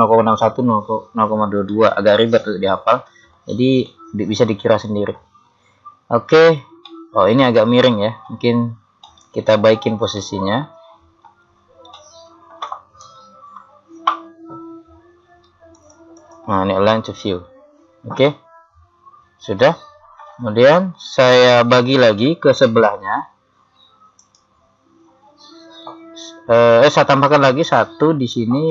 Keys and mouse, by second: 1.8 middle click, 13.1 KP_3, 14.3-17.8 drag, 18.4-20.3 middle drag, 20.7 KP_3, 23.2 z, 24.2-26.2 right drag.